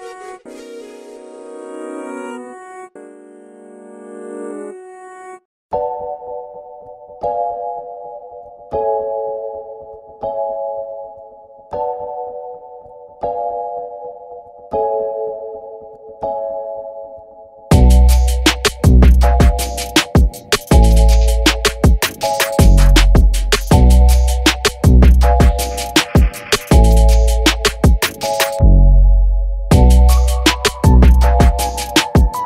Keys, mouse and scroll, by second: 0.0-2.0 typing, 2.6 click, 4.2 ctrl+alt+b, 4.6 scroll down 1, 4.7 alt+a, 4.8-5.3 scroll up 1, 5.3 scroll down 1, 5.4-5.8 scroll up 1, 6.6-7.3 middle drag, 7.3 click, 7.6 click, 7.8 middle click, 8.1 KP_1, 8.6 KP_0, 8.9-9.4 scroll down 2, 9.7 click, 10.1 KP_Decimal, 10.6 scroll down 12, 10.9 scroll up 1, 11.2 z, 11.6 click, 11.9 click, 12.6 z, 13.0 click, 13.5 click, 13.9 shift+middle click, 14.1 scroll up 1, 14.2 shift+middle click, 14.4 alt+a, 14.6 click, 15.1 r, 17.0 click, 17.4 click, 18.0 click, 18.8 click, 19.0 click, 19.4 alt+a, 19.6 click, 19.8 click, 20.4 click, 21.0 r, 21.7 r, 22.3 g, 23.0 alt+a, 23.4 alt+z, 23.4 alt+z, 23.8 alt+z, 24.1 Left, 24.2 Left, 24.4 Left, 24.6 Left, 24.8 Left, 25.1 alt+z, 25.4 click, 25.7 click, 26.2-29.1 typing, 27.4 click, 30.3 shift+d, 31.1 alt+r, 31.5 s.